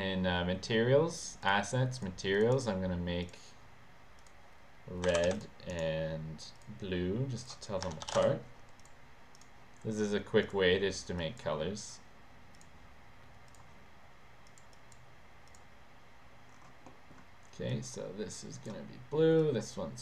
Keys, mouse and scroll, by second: 1.5 click, 2.0 click, 2.4 click, 2.6 right click, 3.3 click, 4.2 click, 5.5 click, 5.8 right click, 6.6 click, 7.5 click, 7.7-8.7 typing, 9.5 click, 10.5 click, 11.3 click, 11.9 click, 12.6 click, 14.5 click, 14.9 click, 15.6 click, 17.0 middle click, 17.8-18.8 drag, 19.5-20.0 drag.